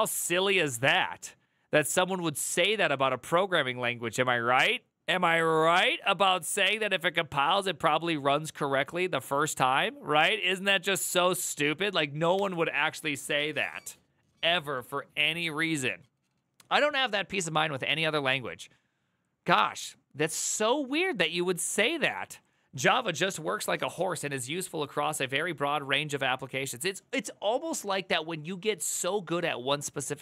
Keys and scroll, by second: 12.1 alt+[, 16.4 alt++.